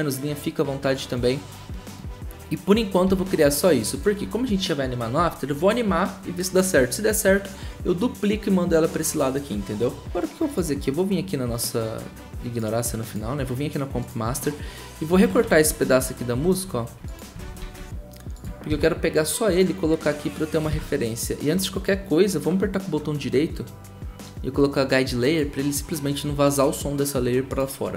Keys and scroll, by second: 3.0 v, 15.7 ctrl+shift+d, 16.4 ctrl+z, 17.6 ctrl+shift+d, 18.7 ctrl+c, 20.7 ctrl+v.